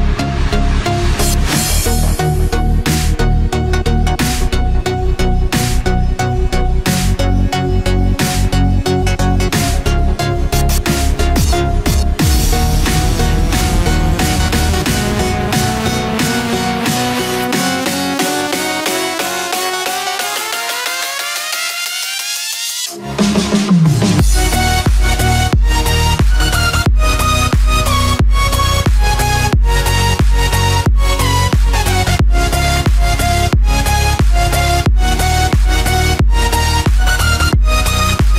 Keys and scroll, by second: 1.4 ctrl+-, 2.5 ctrl+=, 4.3 ctrl+-, 10.9 ctrl+f, 11.3 ctrl+d, 15.7 ctrl+=, 19.2 ctrl+f, 19.5 ctrl+d, 22.1 ctrl+d, 25.0 ctrl+f, 25.2 ctrl+d, 30.2 ctrl+f, 30.5 ctrl+d, 34.4 ctrl+f, 34.7 ctrl+d, 35.7 ctrl+-.